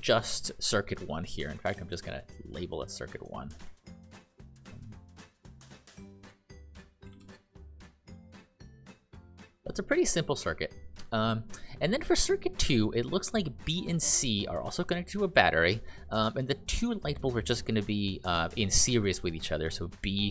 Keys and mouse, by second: 2.3 click, 5.5-7.8 typing, 8.9 click, 11.0 click.